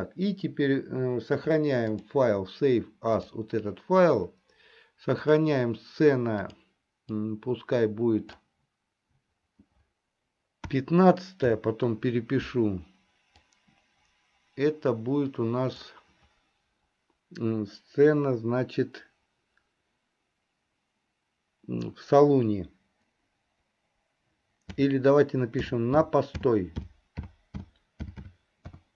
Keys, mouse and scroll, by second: 2.1-4.1 drag.